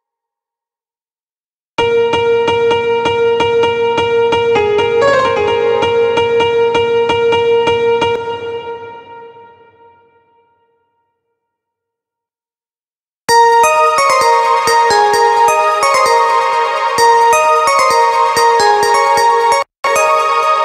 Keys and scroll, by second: 1.2 space, 7.6 space, 12.8 space.